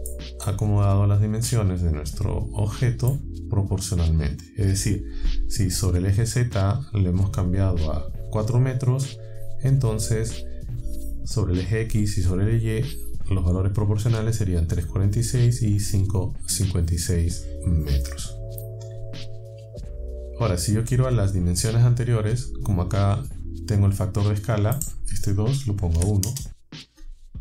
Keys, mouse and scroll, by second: 0.1-3.3 middle drag, 24.8 click, 26.0 KP_1.